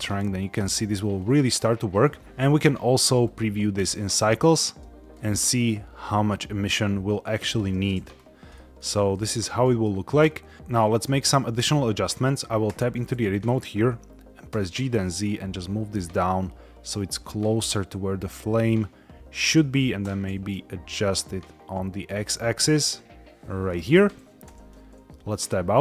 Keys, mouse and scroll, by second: 2.2 z, 2.4-3.4 drag, 5.0-7.4 drag, 8.1 scroll up 1, 8.4 middle click, 9.1 shift+middle click, 9.5 middle click, 12.6 Tab, 14.4 g, 14.7 z, 19.3 click, 20.0 g, 20.1 x, 23.5 shift+click, 24.3 Tab.